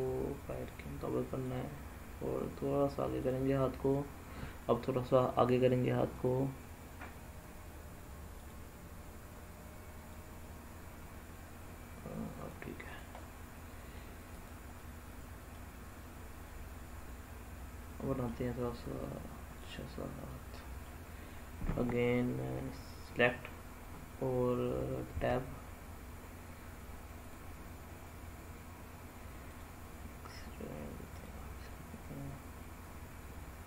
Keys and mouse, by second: 3.2 drag, 4.3 click, 8.3 click, 10.0-12.4 drag, 12.8 click, 13.2-13.9 middle drag, 14.4 click, 14.7-15.5 middle drag, 16.5-18.2 middle drag, 20.2-20.8 middle drag, 22.8 click, 25.1 Tab, 27.2 click, 29.4 click, 31.6-33.6 middle drag.